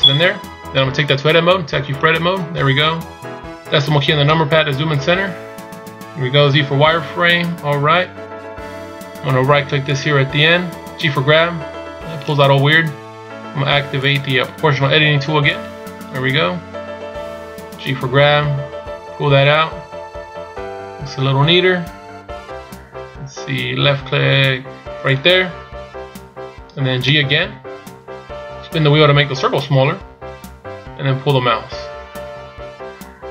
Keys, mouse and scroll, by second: 1.9 Tab, 4.4 KP_Decimal, 6.0-6.4 scroll up 1, 6.7 z, 8.4 a, 10.0 right click, 11.3 g, 14.3 click.